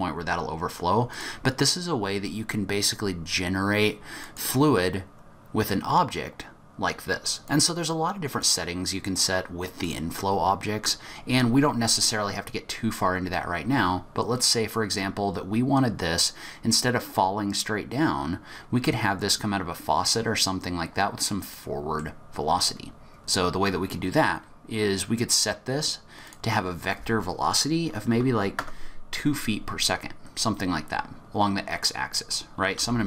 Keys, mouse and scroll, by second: 1.2 click, 7.4 click, 9.8 click, 21.5 middle click, 22.0-22.6 scroll down 1, 22.6-23.0 scroll down 2, 23.0-24.5 scroll up 4, 26.2 click, 31.1-32.7 scroll down 2, 32.7 scroll down 1, 32.7 g.